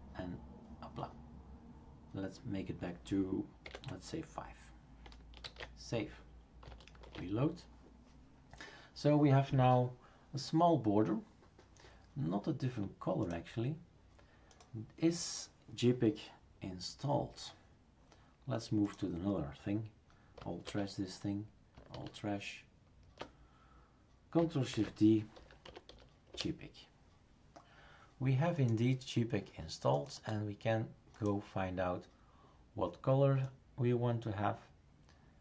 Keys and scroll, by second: 3.6 Delete, 5.4 ctrl+s, 7.0 shift+super+r, 20.6 alt+t, 21.9 alt+t, 24.7 shift+super+d, 25.1-26.4 typing.